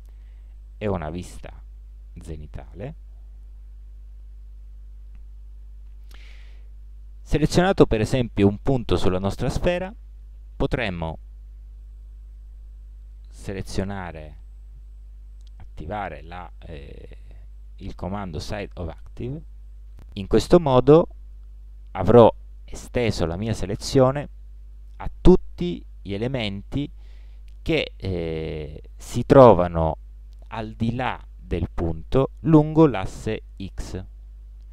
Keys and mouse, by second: 1.4 KP_7, 1.6 KP_7, 4.3 z, 4.8 z.